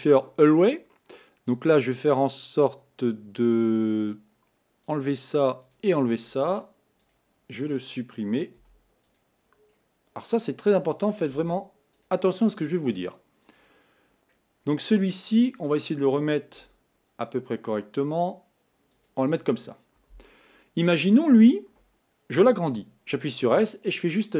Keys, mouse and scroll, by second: 5.0 click, 5.7 click, 7.1 click, 8.7 x, 9.9-10.8 scroll down 1, 10.8 scroll down 1, 10.9 click, 11.4 x, 12.5-13.5 scroll up 5, 13.5 click, 14.2-15.6 scroll down 2, 15.6 click, 16.8 r, 23.2 s.